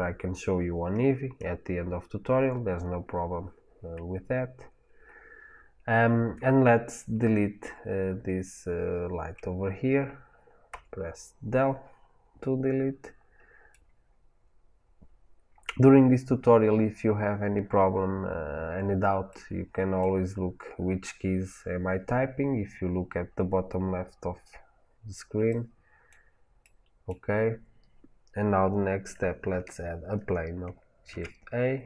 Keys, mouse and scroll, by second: 10.6 Delete, 12.9-31.8 middle drag, 31.0 shift+a.